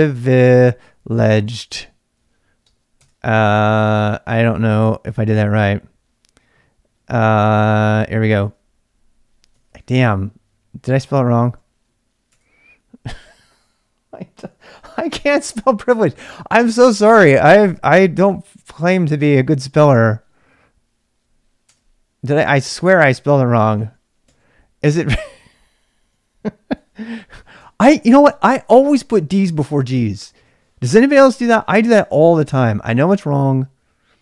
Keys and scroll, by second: 0.0-5.5 typing, 8.2 x, 8.4 Return, 9.4-11.9 typing, 12.3 Return, 14.3-15.5 typing, 17.3-19.1 typing, 20.9-21.6 typing, 22.7-30.3 typing, 32.2 x, 33.1 Return, 33.7-34.2 typing.